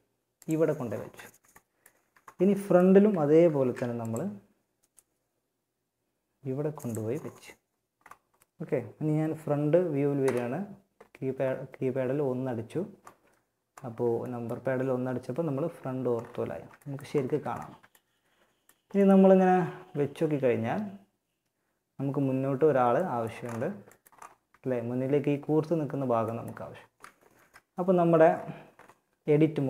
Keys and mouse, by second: 1.2 a, 2.7 ctrl+r, 9.4 KP_1, 16.5 a, 23.5 z, 26.4 a, 26.6 a.